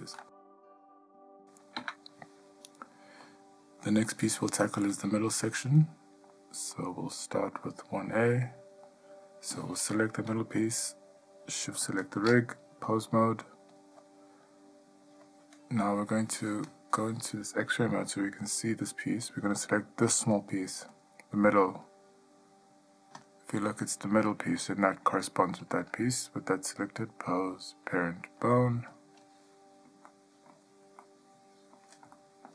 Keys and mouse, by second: 1.9 Tab, 3.4-4.2 middle drag, 4.6 shift+middle click, 5.9-6.5 shift+middle drag, 6.9-7.4 middle drag, 7.8-8.3 shift+middle drag, 8.6-9.0 middle drag, 9.7 click, 12.1 shift+click, 13.1-14.0 drag, 18.1-18.4 middle drag, 18.8-19.4 ctrl+middle drag, 20.5 click, 21.1 click, 23.4 click, 27.1-29.1 drag, 30.3-30.7 ctrl+middle drag, 31.2-31.9 middle drag, 32.3-32.5 shift+middle drag.